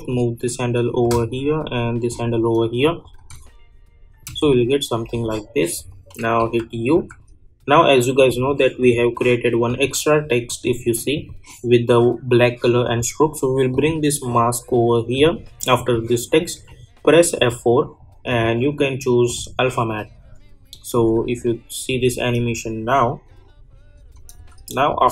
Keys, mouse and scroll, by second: 3.3 space, 5.2 click, 6.4 u, 6.9 u, 8.1-15.7 drag, 17.3 F4, 18.3 click, 21.9 space, 23.9 space.